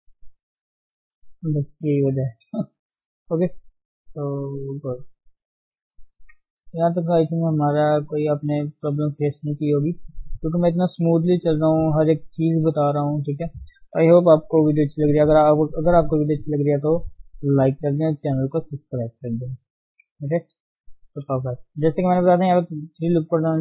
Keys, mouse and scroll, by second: 0.2 click, 1.4 g, 3.0 r, 3.8-4.2 scroll down 3, 4.2-5.6 shift+middle drag, 5.6 scroll down 2, 5.8 shift+middle click, 6.1 Tab, 6.5 scroll down 2, 6.8 middle click, 7.5-9.7 middle drag, 14.5 KP_1, 15.1 scroll down 2, 15.5-19.7 shift+middle drag, 19.7 scroll up 1, 20.5 shift+middle click, 20.7 Tab, 20.8-21.3 scroll up 2, 21.4-23.6 shift+middle drag.